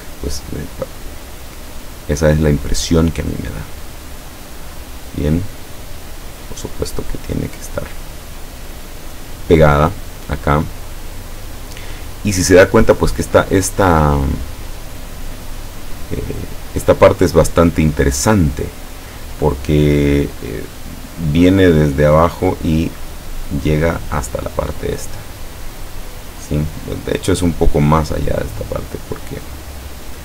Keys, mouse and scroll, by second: 4.8 click, 5.8-8.1 drag, 8.9-10.0 drag, 13.7-15.4 drag, 15.9-17.4 drag, 29.5 click.